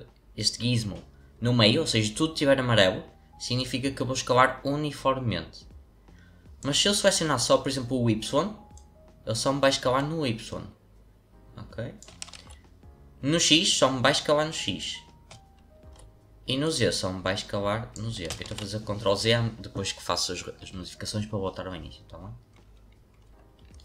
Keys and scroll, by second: 12.3 ctrl+z, 15.7 ctrl+z, 18.4 ctrl+z.